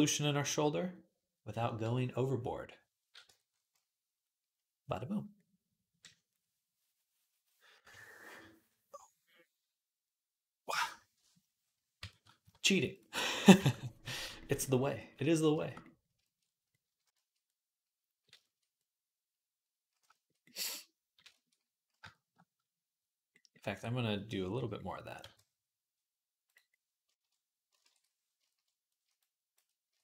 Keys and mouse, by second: 0.6 /, 3.1 Tab, 11.8 Tab, 12.2 q, 13.4 Tab, 23.4 Tab, 24.3 /, 25.0 q, 27.6 ctrl+Tab.